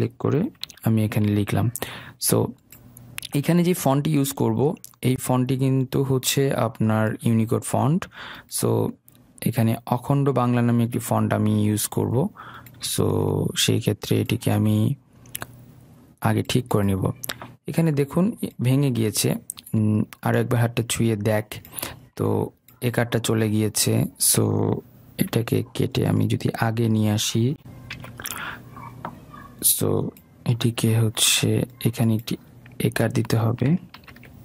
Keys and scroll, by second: 0.8 ctrl+v, 1.5 ctrl+a, 25.4 ctrl+x, 28.1 ctrl+v, 34.1 ctrl+z.